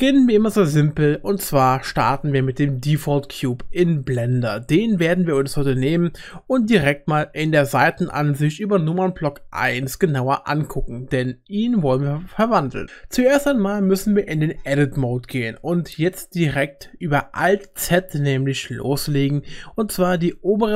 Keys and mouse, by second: 4.0 click, 9.3 KP_1, 13.8 Tab, 17.9 alt+z, 20.2-20.7 drag.